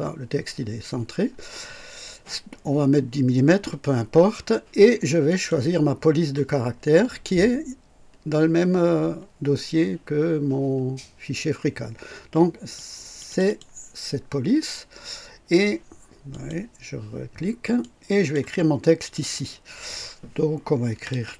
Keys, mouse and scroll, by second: 5.2 click, 12.7 click, 16.3 click, 17.8 click, 20.6-21.3 typing.